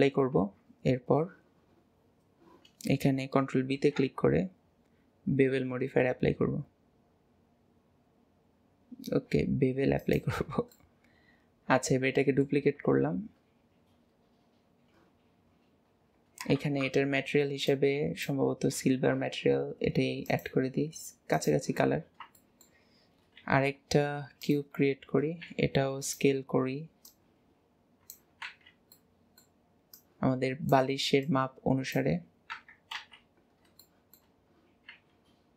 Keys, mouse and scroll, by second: 0.4 Tab, 10.8-13.9 middle drag, 14.8-15.4 scroll down 2, 15.7 scroll up 2, 20.4-22.1 drag, 22.1-22.5 scroll up 1, 22.5-23.1 shift+middle drag, 23.1 scroll down 2, 23.5 shift+a, 24.9 scroll down 1, 25.5 s, 27.1 click, 28.6 ctrl+z, 29.1 middle click, 30.0 click, 31.4-32.6 drag, 32.6 KP_1, 33.1 alt+z, 33.6-33.9 scroll up 2, 33.9 shift+middle click, 34.6-34.9 scroll up 1, 34.9 s.